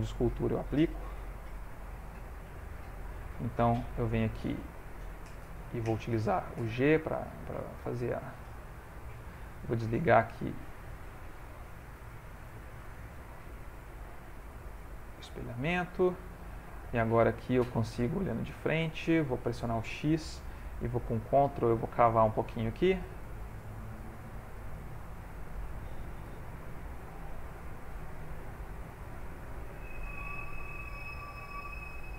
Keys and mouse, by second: 1.1 ctrl+a, 2.2 ctrl+Tab, 3.7 f, 6.4 g, 7.1 f, 8.0 click, 10.3 click, 11.4 click, 15.6 middle click, 18.7 click, 19.4 ctrl+middle click, 20.3 x, 20.9 ctrl+click, 23.0 ctrl+click, 23.4 ctrl+click, 23.7 ctrl+click, 24.1 ctrl+click, 24.3 ctrl+click, 24.6 ctrl+click, 24.8 ctrl+click, 26.3 f, 27.2 ctrl+click, 27.5 ctrl+click, 28.2 ctrl+click, 28.4 ctrl+click, 28.9 ctrl+click, 29.2 ctrl+click, 29.7 ctrl+click, 30.1 ctrl+click, 30.5 ctrl+click, 31.3 f, 31.8 g.